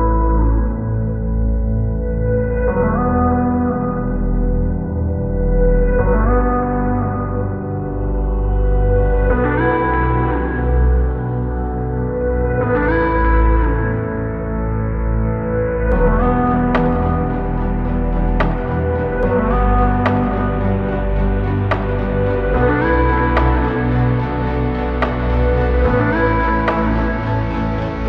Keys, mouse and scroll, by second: 14.9 space, 27.6 space.